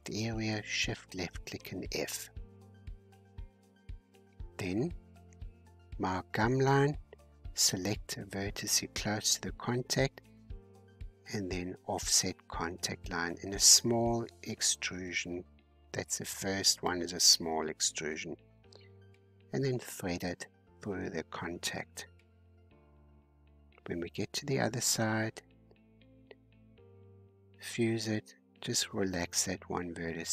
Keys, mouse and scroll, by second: 0.2-1.5 shift+drag, 1.5 f, 2.2-3.9 shift+middle drag, 3.9 click, 4.5 middle click, 5.4 scroll down 1, 5.6-6.0 scroll up 2, 6.1-7.1 shift+middle drag, 7.1 scroll up 4, 8.2-11.4 drag, 11.4-12.4 middle drag, 12.4 e, 15.2 e, 16.2 e, 17.1 e, 17.9 e, 18.9-20.3 middle drag, 20.3-22.4 typing, 23.5-24.6 shift+drag, 24.6 f, 25.0 scroll down 2, 25.6 shift+middle click, 26.2 scroll up 3, 27.2 click, 27.7 g, 28.6-29.3 scroll down 5, 29.3 shift+middle click, 30.2-30.3 scroll up 3.